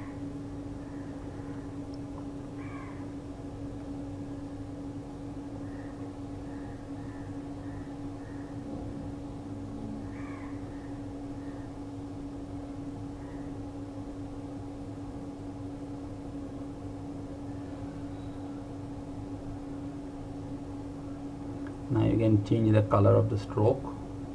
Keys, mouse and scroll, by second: 1.3 click, 17.4 ctrl+Num_Lock, 17.7 ctrl+a, 19.9 click, 22.8 click.